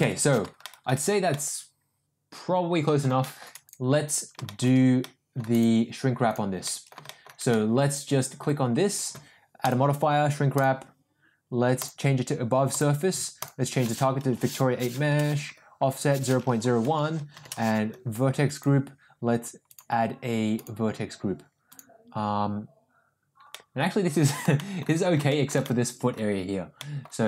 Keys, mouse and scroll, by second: 0.0 n, 0.6 middle drag, 1.3-3.0 middle drag, 3.2 shift+middle drag, 3.9 shift+middle drag, 4.3 middle click, 4.3 ctrl+shift+z, 4.4 shift+middle drag, 5.0-5.3 middle drag, 5.5 click, 6.6 middle click, 7.0 shift+middle drag, 7.4-8.3 middle drag, 9.5-10.7 drag, 11.7-12.9 drag, 13.4-15.4 drag, 16.0-17.8 drag, 18.7-19.8 drag, 21.9 click, 23.5-24.2 middle drag, 24.5 shift+middle drag, 25.2 shift+middle drag, 25.6-26.0 middle drag, 26.8 middle drag.